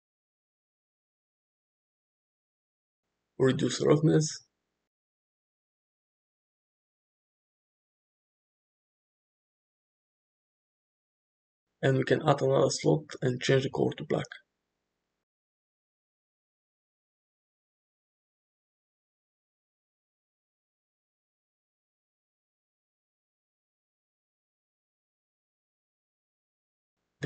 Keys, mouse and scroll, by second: 1.0-1.8 middle drag, 3.7-6.2 drag, 6.6-8.7 middle drag, 9.2 shift+middle drag, 9.5-10.4 middle drag, 14.1 click, 18.8-20.0 drag, 20.9 Tab, 22.2 middle click, 24.2 alt+z, 24.8 alt+z, 25.5 shift+middle click, 26.2-27.2 drag.